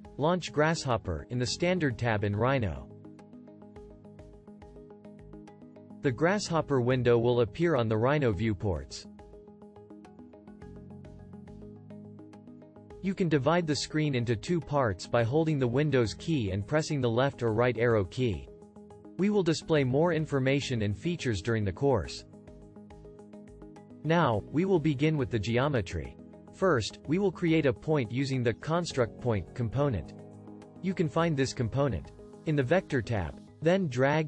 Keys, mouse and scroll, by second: 17.3 super+Left, 17.9 super+Right.